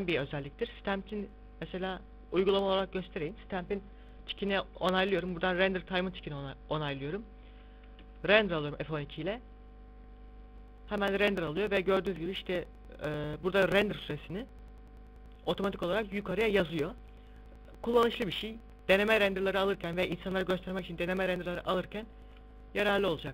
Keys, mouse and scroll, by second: 1.1 click, 7.3-8.5 scroll down 1.